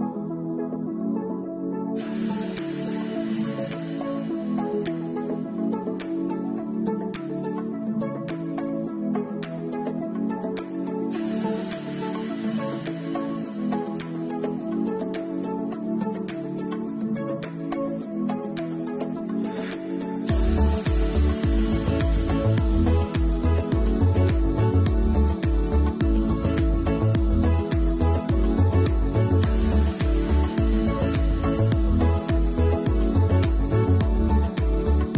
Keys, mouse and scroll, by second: 0.0 middle click, 0.0 click, 0.0 scroll down 4, 1.4 click, 1.8 shift+middle click, 2.2 alt+q, 2.6 middle click, 2.9 scroll down 2, 3.3 shift+middle click, 3.6 middle click, 4.9 shift+middle click, 5.3 middle click, 5.7 Tab, 6.4 middle click, 8.1 middle click, 8.4-9.4 scroll up 3, 8.7 middle click, 12.7 scroll up 2, 13.5 middle click, 13.5 scroll up 3, 19.9 scroll up 1, 21.5 middle click, 21.5-22.3 scroll up 3, 22.2 middle click, 30.8 click, 31.6 shift+click, 31.9 2, 32.4 middle click.